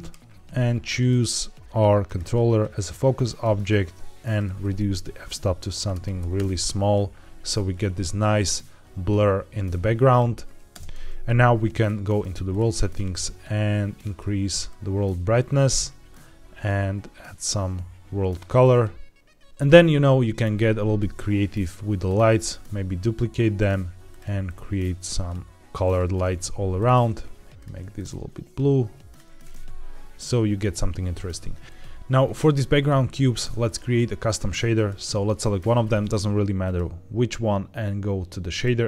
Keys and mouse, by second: 0.8 click, 4.1-6.3 drag, 10.6 space, 19.4 ctrl+z, 19.4 shift+d, 20.3 shift+d, 21.9 click, 23.4 click, 24.0 click, 26.6 click, 31.6 ctrl+s, 33.5 click, 34.6 click, 36.6-38.5 drag.